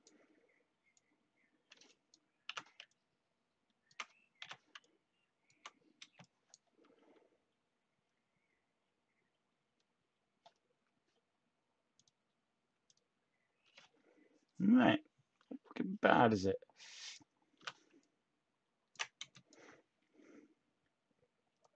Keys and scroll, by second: 5.7-6.4 typing, 10.7 Tab, 12.7 Tab, 17.5 t.